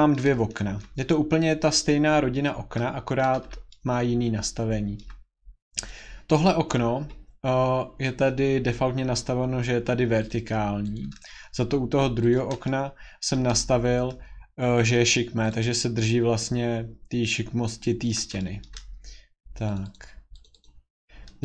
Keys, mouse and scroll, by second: 0.2 shift+middle click, 0.5 middle click, 0.6 scroll, 2.8 shift+middle click, 3.7 scroll, 5.0 shift+middle click, 5.2 scroll, 5.8 click, 10.2 click, 10.3 click, 11.0 click, 11.0 click, 12.3 click, 13.4 shift+middle click, 15.5 click, 18.1 shift+middle click, 19.8 click, 19.8 shift+middle click, 20.0 click, 20.4 click, 20.7 click, 20.7-21.4 shift+scroll.